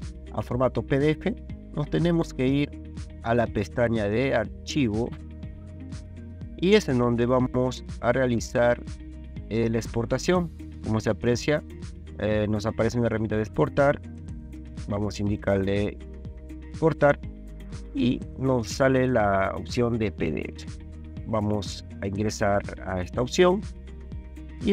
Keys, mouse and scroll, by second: 2.4 ctrl+2, 14.8 click, 16.4 click, 23.1 click.